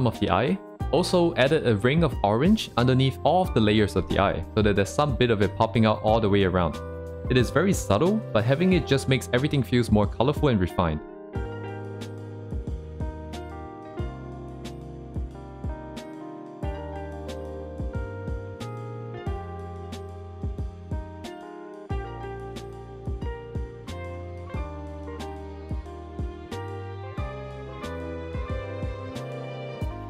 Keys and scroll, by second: 0.2 c, 0.4 ctrl+z, 1.3 ctrl+z, 2.4 ctrl+z, 3.9 2, 4.1 ctrl+z, 11.8 ctrl+z, 13.7 ctrl+z, 15.3 ctrl+z, 18.9 ctrl+z, 19.7 ctrl+z, 20.4 ctrl+z, 20.8 c, 21.0 ctrl+z, 22.0 ctrl+z, 22.7 c, 23.9 ctrl+z, 24.5 ctrl+z, 25.4 ctrl+z, 27.5 ctrl+z, 28.0 ctrl+z, 29.0 ctrl+z, 29.5 ctrl+z, 29.8 ctrl+z.